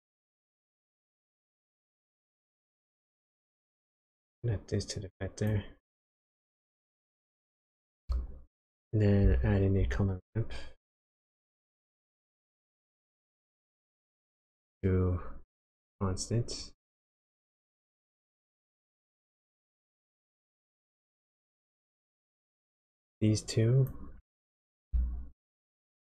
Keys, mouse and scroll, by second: 4.2 click, 6.5 click, 7.3 click, 9.7 shift+a, 14.5 click, 19.9 click, 22.5 click, 24.5 ctrl+shift+click.